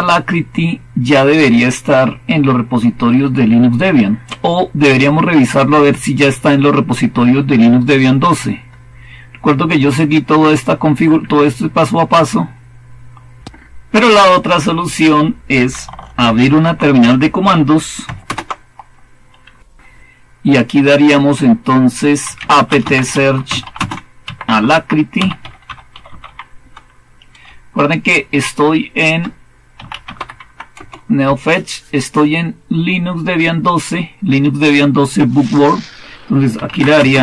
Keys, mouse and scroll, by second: 0.3-3.5 scroll down 1, 3.5-5.2 scroll down 1, 5.2-7.5 scroll down 1, 7.5-8.0 scroll down 1, 8.0-8.5 scroll up 1, 8.5-9.9 scroll up 1, 9.9-11.8 scroll up 1, 11.8-16.4 scroll up 1, 16.4 super+8, 18.1 super+Return, 21.9-30.6 typing, 30.6 Return, 36.2-37.2 typing.